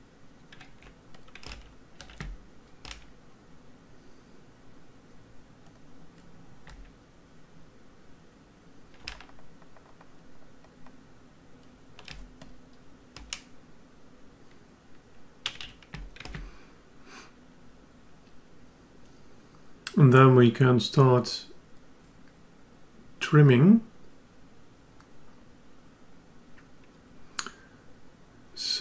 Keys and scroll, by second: 1.5 ctrl+Tab.